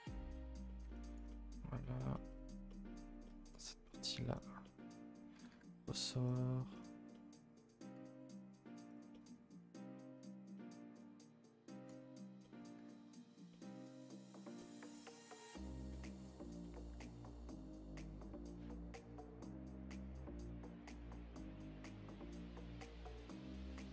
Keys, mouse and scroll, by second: 1.8 middle click, 2.4 scroll up 1, 2.7 middle click, 2.9 middle click, 3.5-3.8 scroll down 1, 3.8 click, 4.3 click, 4.6 middle click, 5.0-5.3 scroll up 1, 5.3 g, 6.7 click, 7.1 middle click, 7.9 g, 9.1-12.1 middle drag, 12.1 click, 12.4 middle click, 12.7 g, 13.5-15.1 middle drag, 15.1 click, 15.6 click, 15.9 middle click, 16.3 click, 16.6 middle click, 16.9 g, 18.0 click, 18.3 Tab, 18.4-18.9 middle drag, 18.9 a, 19.1 a, 19.2 KP_0, 20.7 click, 21.5 click, 22.3 click, 23.2 g.